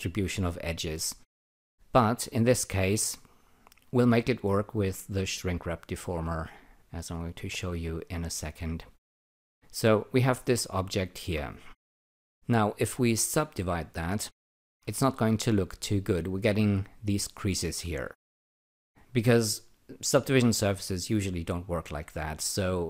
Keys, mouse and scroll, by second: 1.0-4.1 alt+drag, 8.5 click, 9.7 alt+right click, 10.3 alt+click, 13.2 alt+click, 14.8 ctrl+r, 18.0-18.4 scroll up 3, 18.7 alt+click.